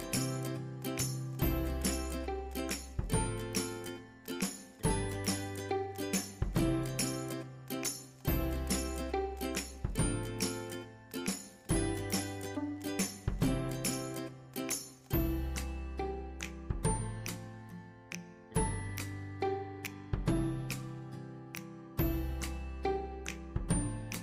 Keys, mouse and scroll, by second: 0.0-1.3 typing, 0.4 scroll up 1, 1.0-6.3 drag, 5.4-5.9 typing, 6.3 scroll down 1, 7.3-7.8 scroll up 1, 7.8 click, 8.6 shift+right click, 9.1 click, 10.9 space, 11.1-15.1 drag, 15.1 scroll up 1, 15.7-20.8 drag, 20.5-21.3 typing, 20.8 scroll down 1, 21.3 click, 22.8-24.2 shift+drag.